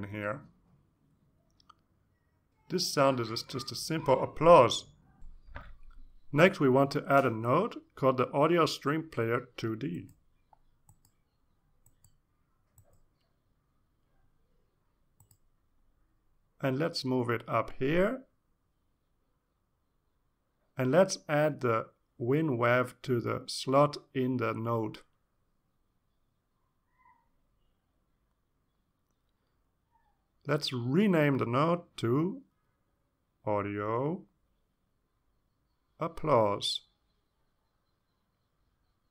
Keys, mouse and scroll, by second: 0.4 Return, 2.3 click, 4.6 alt+Tab, 5.2 alt+Tab, 9.4-11.0 drag, 12.2 click, 15.5 click, 16.9-18.7 typing, 20.1 click, 21.4 click, 23.3-25.5 drag, 26.2 click, 28.2-30.6 drag, 32.1-34.3 drag, 38.4 click.